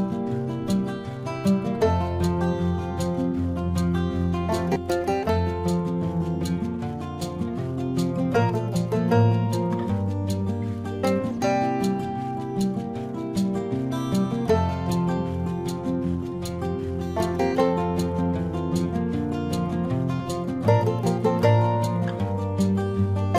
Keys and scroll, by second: 0.1 space, 1.4 space, 3.4 space, 3.8 ctrl+=, 4.6 ctrl+=, 4.7 space, 5.4 ctrl+-, 5.8 ], 5.8 ctrl+alt+z, 6.2 ctrl+alt+z, 6.7 space, 7.5 space, 7.9 ctrl+alt+z, 8.2 ctrl+alt+z, 9.0 space, 9.8 ctrl+alt+z, 10.7 space, 12.6 space, 13.9 space, 14.5 ctrl+alt+z, 15.2 space, 16.1 ], 16.3 space, 17.4 space, 17.7 space, 18.0 ctrl+alt+z, 19.2 space, 19.9 ctrl+alt+z, 21.2 ctrl+alt+z, 21.5 ctrl+alt+z, 22.2 ctrl+alt+z, 22.8 space.